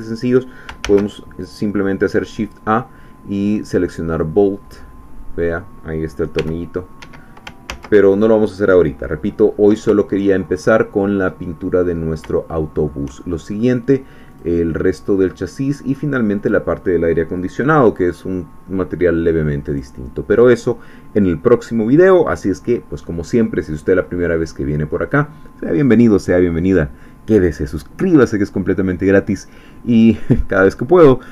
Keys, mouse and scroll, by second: 0.8 shift+a, 4.1 click, 4.7-5.3 scroll down 2, 6.4 g, 7.0 Escape, 7.7 ctrl+z, 9.2-9.8 scroll up 2, 10.1 shift+middle click, 11.4-11.7 scroll down 2, 12.4 shift+middle click, 13.2 shift+middle click, 14.4 click, 15.3 middle click, 16.5 click, 19.8 click.